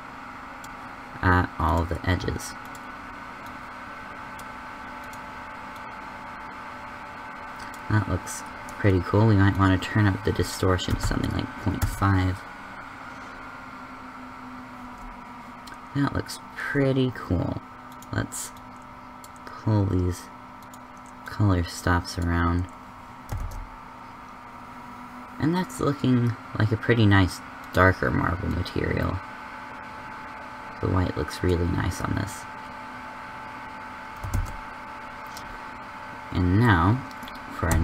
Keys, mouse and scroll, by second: 9.7-11.4 drag, 17.8-20.2 drag, 23.4 shift+z, 37.7 a.